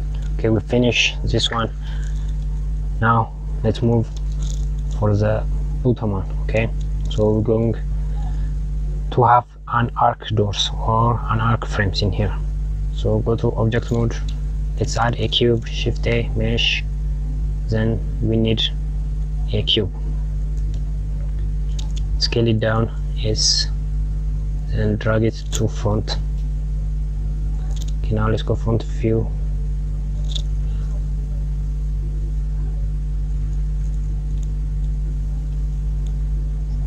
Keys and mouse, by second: 2.8 click, 3.3 Tab, 4.1 KP_Subtract, 7.0 click, 13.3 Tab, 15.0 shift+a, 21.7 click, 22.7 s, 28.9 KP_1, 30.6 g, 33.7 g, 36.2 click.